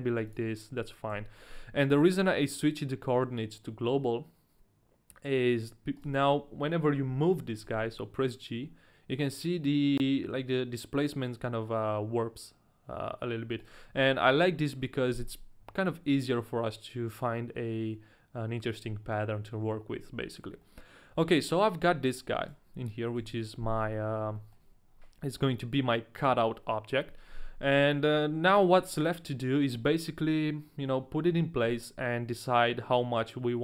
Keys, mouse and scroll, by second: 0.3 ctrl+a, 0.3 click, 0.3 middle click, 1.1 KP_1, 5.9 a, 6.0 right click, 7.6 g, 13.6 right click, 15.7 g, 18.7 right click, 20.6 middle click, 21.4 right click, 21.9 middle click, 22.3 a, 22.4 right click, 23.2 KP_1, 23.9 scroll down 1, 24.6 right click, 24.6 shift+middle click, 24.6-25.4 scroll down 1, 24.6 a, 24.6 KP_1, 31.2 g.